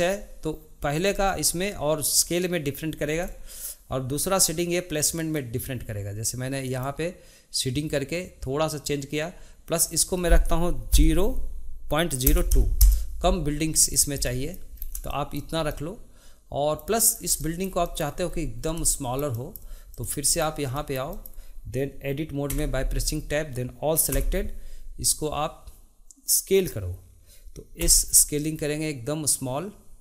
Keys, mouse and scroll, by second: 5.2-9.8 drag, 9.8-12.9 drag, 13.9-14.2 scroll down 2, 14.2 middle click, 14.7-15.1 scroll up 2, 15.1-17.1 shift+middle drag, 17.1 scroll down 1, 17.4-18.3 shift+middle drag, 18.3-18.8 scroll up 4, 18.8-19.9 shift+middle drag, 19.9 click, 20.3-20.7 scroll down 1, 20.8-22.5 shift+middle drag, 22.5 Tab, 24.1 a, 27.8 s.